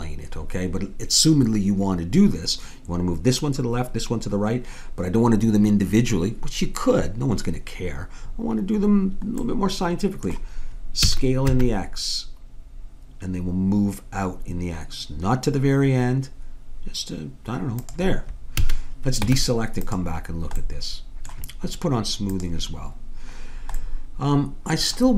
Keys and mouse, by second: 9.5-11.1 middle drag, 11.1 s, 18.6 a, 19.3 Tab, 24.1-25.1 middle drag.